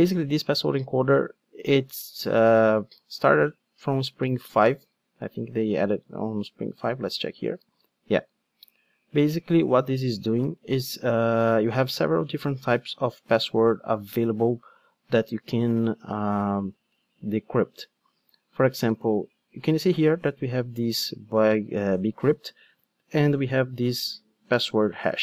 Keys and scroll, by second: 6.7 super+b.